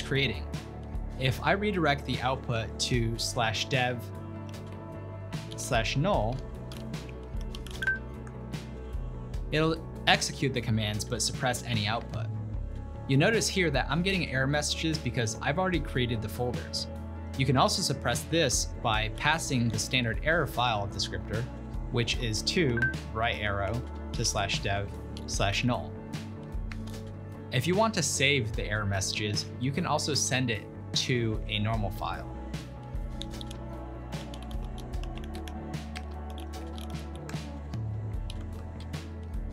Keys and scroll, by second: 3.6 ctrl+p, 4.9-7.4 typing, 12.0 Return, 19.2 ctrl+l, 19.7 ctrl+p, 22.0-27.2 typing, 29.2 typing, 33.3 ctrl+p, 33.6 ctrl+w, 34.0-39.3 typing.